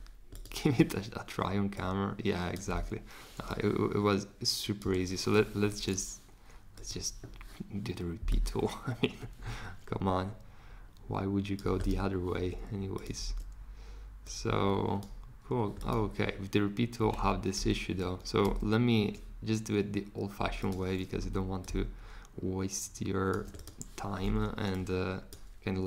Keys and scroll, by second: 2.7 super+z, 4.8 BackSpace, 17.0 super+z, 17.5 super+z, 17.9 super+z, 18.4 super+z.